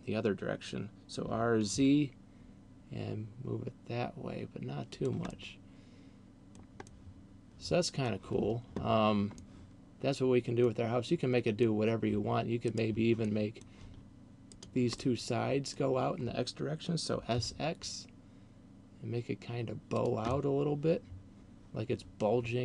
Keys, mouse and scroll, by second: 1.4 r, 5.1 click, 5.4 middle click, 6.9 middle click, 9.6 middle click, 11.4 middle click, 12.6 right click, 13.4 middle click, 14.4 shift+right click, 15.1 middle click, 17.1 s, 20.1 click, 20.4 middle click.